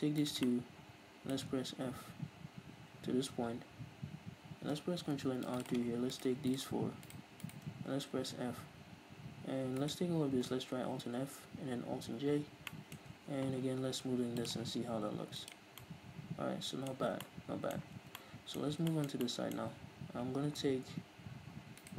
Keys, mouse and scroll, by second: 0.4-5.7 middle drag, 2.0 f, 5.0 ctrl+r, 5.7 click, 6.5-8.2 shift+right drag, 8.2 f, 9.8-10.9 alt+right drag, 10.9 alt+f, 12.2 alt+j, 12.7-14.4 middle drag, 13.2 Tab, 14.4-15.8 drag, 15.8-21.8 middle drag, 17.0 Tab, 17.8 a, 21.8-21.9 right drag.